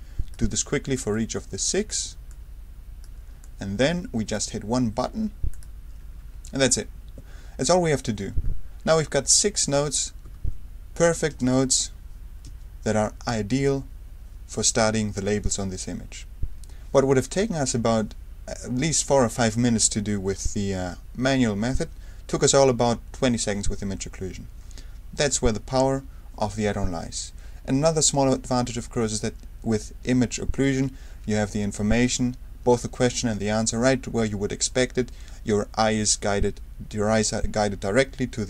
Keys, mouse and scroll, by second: 0.6 r, 1.1-2.4 drag, 2.0 r, 3.2 r, 3.4 click, 5.5 click, 9.3 click, 10.2 Escape, 10.9 click, 11.3 space, 12.4 space, 13.3 space, 25.3 space.